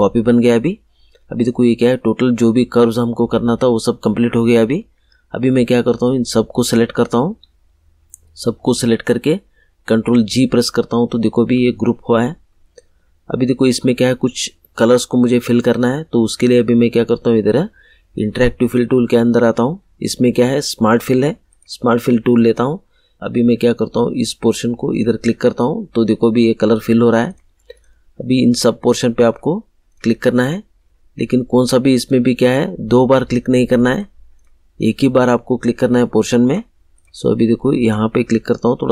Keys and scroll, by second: 9.8 ctrl+g.